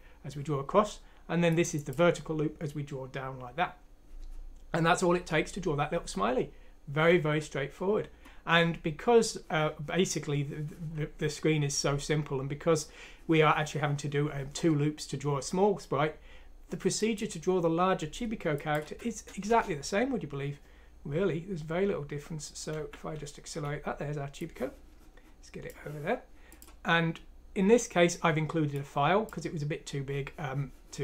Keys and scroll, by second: 18.8 F6, 19.4 Return, 22.7 End, 23.1 End.